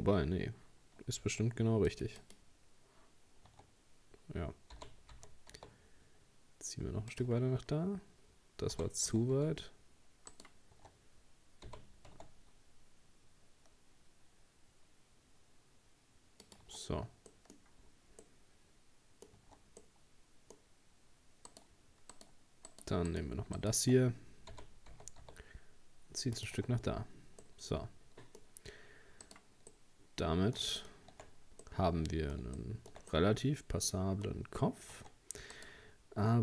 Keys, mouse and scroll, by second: 1.9-2.9 drag, 3.5 Tab, 4.8 g, 7.3 Tab, 7.5-8.6 scroll down 4, 8.7 g, 10.8 Tab, 11.7 g, 16.7 Tab, 17.3 middle click, 17.6-18.2 scroll up 3, 18.2-19.4 middle drag, 19.4 Tab, 19.8-21.5 middle drag, 21.5 right click, 22.1 shift+right click, 22.7 shift+right click, 23.1 shift+right click, 23.6 shift+right click, 24.5 g, 26.6 Tab, 26.8-27.4 scroll down 1, 27.4-28.7 middle drag, 28.7-29.3 scroll down 2, 29.3 right click, 29.7-30.8 middle drag, 30.8 shift+scroll up 1, 31.3-31.6 scroll up 1, 31.6-34.3 middle drag, 34.3-35.0 scroll up 1, 35.0 Tab, 35.5 right click, 35.9-36.4 scroll up 2.